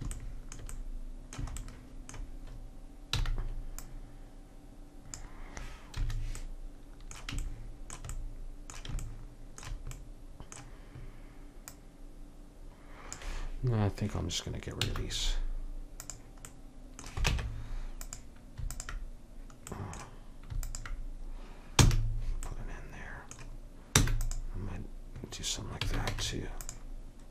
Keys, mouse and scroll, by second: 3.3 c, 11.7-13.6 drag, 14.9 x, 17.3 ctrl+Tab, 19.8-21.9 drag, 21.9 f, 24.0 e, 25.9 a, 26.1 Tab.